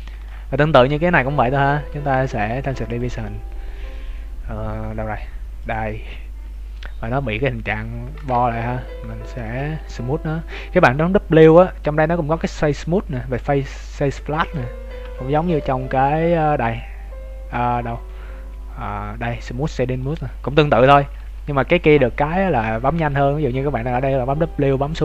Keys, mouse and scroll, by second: 0.1 Tab, 2.4 Tab, 2.8 click, 7.8 Tab, 9.0 a, 9.4 w, 15.0 t, 17.9 Tab, 17.9-18.2 scroll up 1, 20.2 Tab, 20.6 scroll up 3, 21.2 t, 21.4 scroll down 3, 22.9 w, 23.8 w.